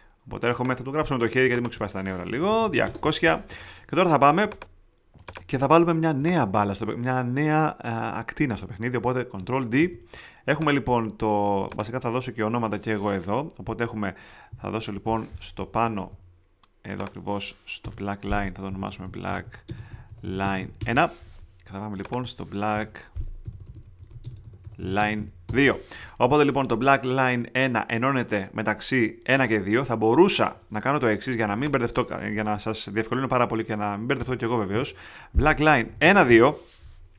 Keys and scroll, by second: 2.0-2.9 typing, 9.7 super+d, 14.4 Up, 15.9 super+z, 17.8 Return, 18.4 shift+Return, 18.4-21.0 typing, 22.7 Return, 23.1-25.6 typing, 34.1 Return, 34.7 Right, 35.6-36.5 typing.